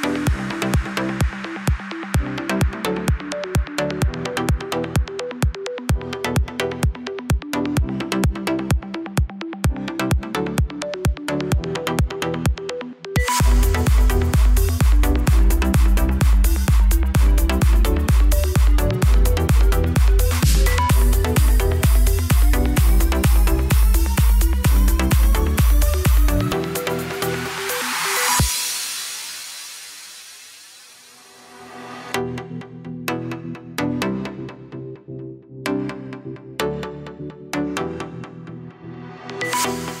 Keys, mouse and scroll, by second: 1.3 KP_3, 1.7-2.3 scroll up 1, 2.3 click, 2.5 scroll up 2, 2.7-5.8 shift+middle drag, 5.8 shift+d, 6.9 r, 8.3 g, 9.5 r, 11.5 scroll down 1, 11.8-14.3 shift+middle drag, 14.3-15.0 drag, 15.3 scroll down 3, 15.4-17.7 middle drag, 17.8 scroll up 1, 17.9 scroll down 2, 18.2-20.0 middle drag, 20.0 click, 20.5 KP_3, 20.9-21.6 scroll up 1, 21.6 click, 23.1 click, 23.3-23.8 middle drag, 23.8 scroll down 4, 24.1-25.9 middle drag, 25.9 KP_1, 31.3 click, 32.2-32.5 scroll down 1, 32.5 shift+middle click, 33.1 s, 33.8 shift+a, 35.6-37.4 drag, 38.1 shift+click, 39.0-40.0 drag.